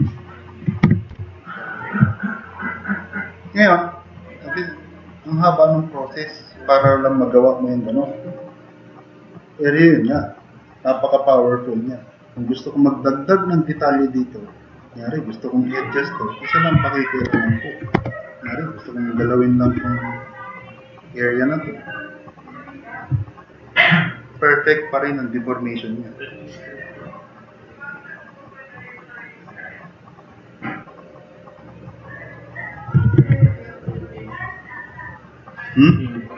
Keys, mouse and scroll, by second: 0.9 4, 1.2 e, 2.0-2.7 super+drag, 3.1-3.9 drag, 4.2-4.5 drag, 4.7-5.6 drag, 5.6-5.9 middle drag, 5.9 click, 6.2 middle click, 17.2 1, 17.9 q, 19.7 e, 22.3 click, 23.3 click, 24.8 click, 25.2-25.7 drag, 26.0-27.2 drag, 28.3-30.0 drag, 30.7-31.9 drag, 32.7 click, 33.2 ctrl+z, 33.6 click.